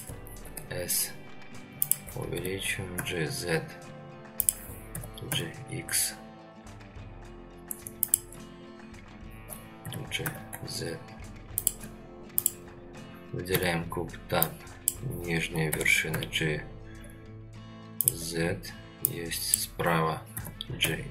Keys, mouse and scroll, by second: 0.4 s, 2.3 g, 4.9 g, 9.8 g, 12.3 click, 13.5 Tab, 14.4 click, 15.7 g, 19.1 click, 20.4 g.